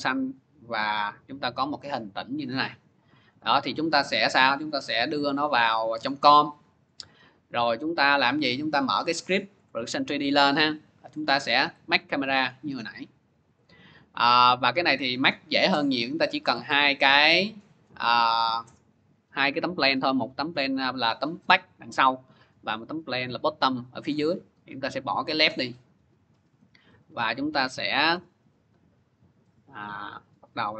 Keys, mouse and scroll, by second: 0.1 click, 3.1 click, 5.1 click, 5.8-6.2 scroll, 9.1 middle click, 9.4 click, 11.0 middle click, 12.1 click, 12.4 click, 13.4 click, 16.4 click, 25.3 click, 26.8 click, 27.9 c.